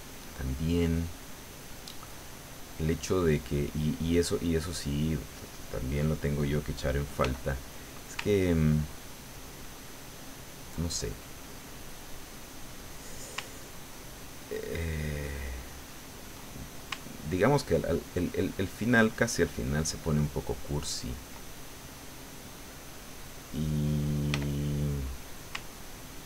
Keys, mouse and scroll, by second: 0.6-1.9 middle drag, 1.9-4.1 middle drag, 7.2 f, 7.7 click, 8.5-10.8 ctrl+drag, 10.9-13.2 ctrl+middle drag, 13.4-16.4 ctrl+drag, 16.4 ctrl+middle click, 17.0-21.4 ctrl+drag, 22.3-23.6 drag, 24.3 f, 25.0 click, 25.6-26.2 ctrl+drag.